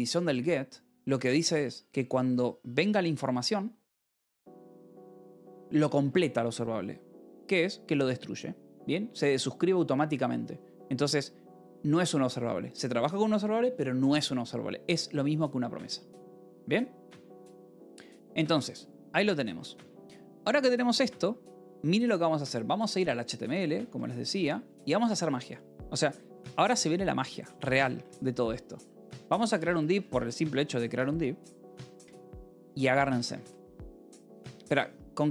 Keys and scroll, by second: 17.7 ctrl+6, 18.1 k, 18.7 j, 23.7 k, 24.1 Return, 26.4 :, 26.8 k, 27.2 Return, 28.5 alt+Tab, 28.7-30.4 typing, 32.2-33.9 typing, 32.5 Return, 34.2 Escape.